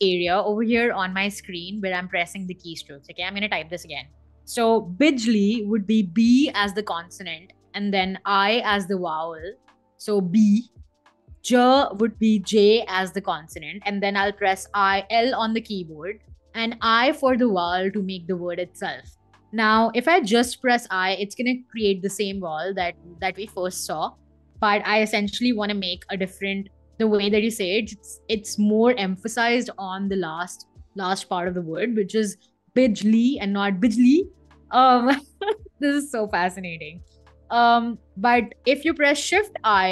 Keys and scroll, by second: 2.7 BackSpace, 5.8 b, 7.9 i, 11.3 j, 14.4 l, 20.0 i, 36.4 BackSpace, 36.7 shift+i.